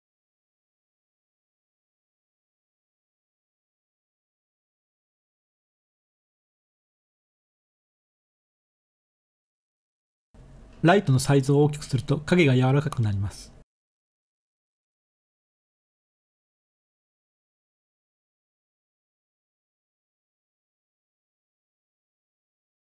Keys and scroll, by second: 2.8 r, 3.6 z, 5.6 1, 10.7-12.3 typing, 15.0-15.7 typing, 18.9 7, 20.1-21.0 typing, 22.1 3.